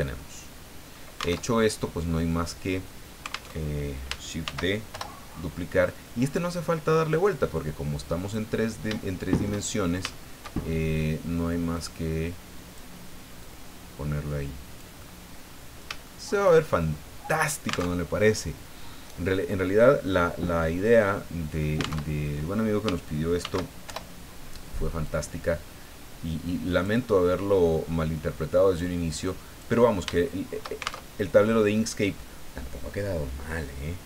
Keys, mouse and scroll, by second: 1.4 alt+Tab, 3.5 alt+Tab, 4.4 shift+d, 4.9 shift+Return, 5.5 middle click, 6.5 middle click, 7.3-8.5 drag, 9.0 shift+middle click, 10.1 shift+middle click, 10.9 click, 11.7-12.9 drag, 13.4-14.9 drag, 15.0 middle click, 16.0 shift+middle click, 16.7 shift+click, 16.9 middle click, 17.9 alt+Tab, 22.0 alt+Tab, 23.4 shift+d, 23.9 shift+Return, 25.0-27.8 drag, 28.7-29.8 drag, 30.1 shift+middle click, 30.7-31.0 shift+scroll up 1, 31.0 alt+shift+Tab, 31.0-34.0 alt+shift+middle drag.